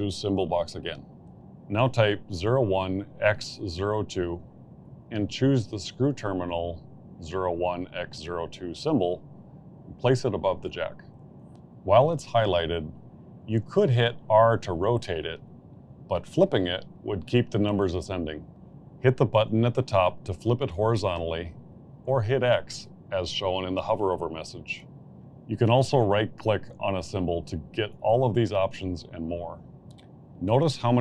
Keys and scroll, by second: 2.4 0, 2.9 1, 3.9-5.5 typing, 24.7 Escape.